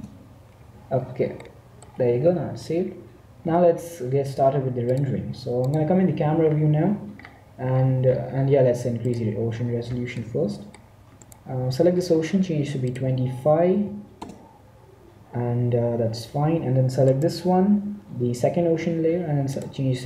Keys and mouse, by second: 0.0 Return, 0.9 middle click, 5.6 click, 6.4 middle click, 8.9-10.7 drag, 10.7 middle click, 11.2-13.0 right drag, 12.8-15.5 drag, 17.9-19.2 right drag, 19.6-20.0 drag.